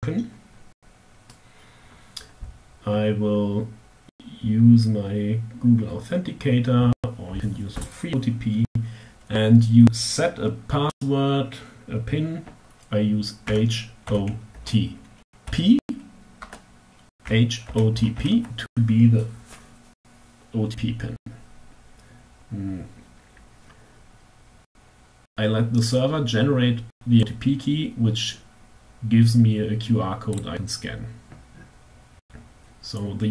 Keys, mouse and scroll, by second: 13.1 h, 13.8 o, 14.3 t, 15.1 p, 15.9 Tab, 16.7 h, 17.1 o, 17.4 t, 29.8 click.